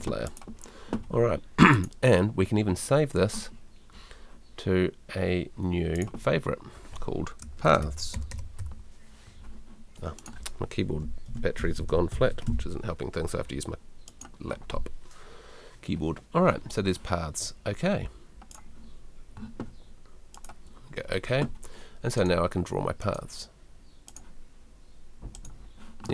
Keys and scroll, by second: 11.0-12.9 typing.